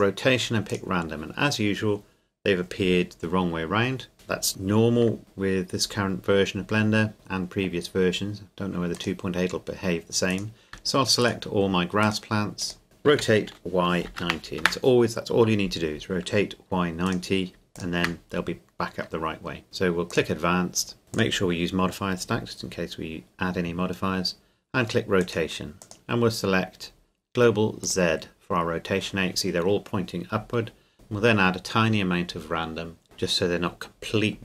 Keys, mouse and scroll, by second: 5.2 click, 7.1-8.8 scroll down 1, 9.0 click, 10.3 right click, 11.2-13.1 shift+right drag, 13.1 r, 13.5 y, 14.1 KP_9, 14.6 KP_Enter, 17.0 click, 17.8 shift+click, 18.4-19.4 scroll up 2, 19.4 scroll up 1, 19.6 scroll down 1, 20.1 click, 21.2 click, 22.7-23.8 scroll down 1, 25.2 click, 30.9 click.